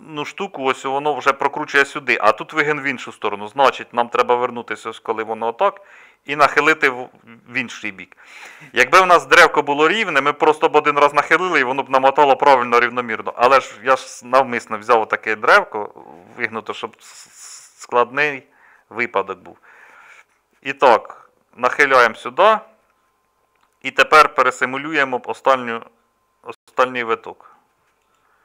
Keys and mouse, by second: 18.2 r, 21.2 click, 24.2-28.4 middle drag.